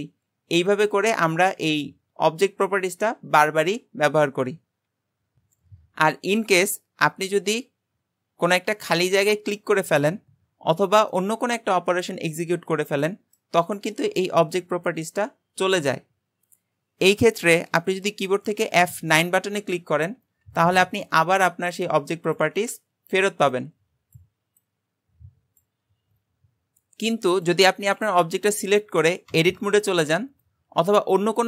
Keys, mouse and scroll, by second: 9.6 click, 11.1-14.1 middle drag, 27.3 click, 27.9 click, 29.3 Tab, 30.2 Tab.